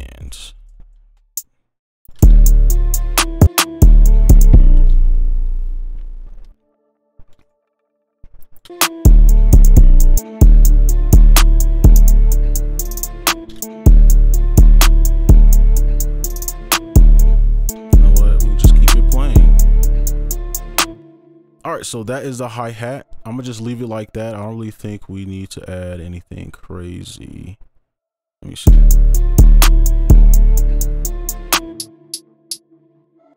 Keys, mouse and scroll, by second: 0.6 shift+right click, 2.2 shift+right click, 4.9 space, 5.1 ctrl+a, 6.0 shift+click, 7.4 right click, 8.1-8.7 scroll down 1, 9.0 space, 10.1 double click, 13.3 right click, 13.6 space, 17.3 space, 17.5 right click, 18.7-19.1 scroll down 1, 19.5 right click, 22.0 double click, 24.3-26.3 scroll down 1, 28.6 space, 31.7 space, 32.5 double click, 33.1 ctrl+click.